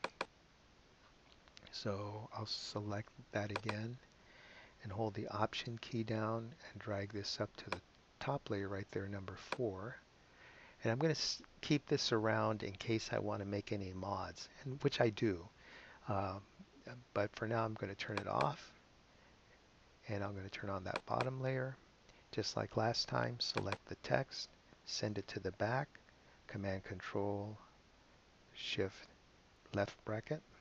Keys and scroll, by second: 30.5 shift+super+[.